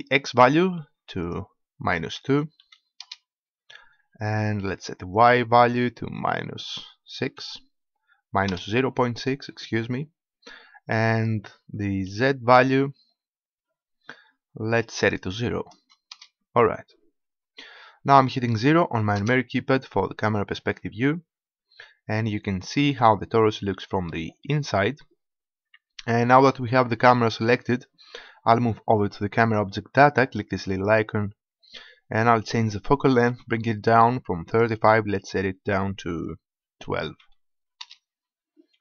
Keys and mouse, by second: 0.4-3.2 drag, 5.2-7.0 drag, 12.2 KP_1, 19.2 KP_0, 30.8-32.8 drag, 34.6-36.4 drag.